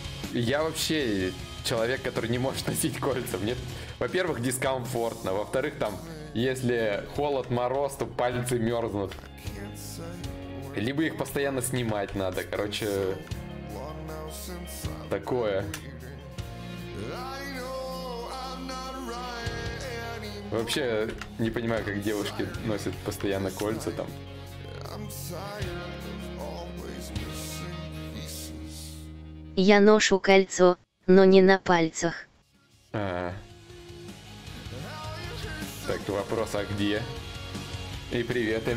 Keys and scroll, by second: 31.6 ctrl+z.